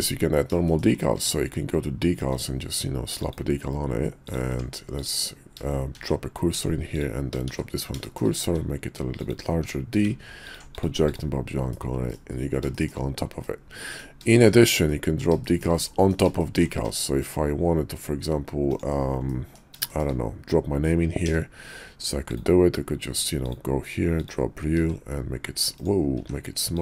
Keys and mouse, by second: 0.0 middle click, 0.6 shift+middle click, 1.2 d, 4.2 click, 4.5 Tab, 4.9 click, 5.9 shift+s, 6.5 Tab, 7.6 shift+s, 8.1 shift+click, 8.4 s, 10.5 s, 10.5 d, 11.7-12.1 middle drag, 12.7 shift+middle drag, 13.4-13.9 middle drag, 14.3 shift+middle click, 14.9-15.2 middle drag, 15.4 shift+middle drag, 15.9 middle drag, 16.4 shift+middle drag, 18.6 d, 19.3 middle click, 19.9 shift+middle click, 24.8 s, 26.2 s.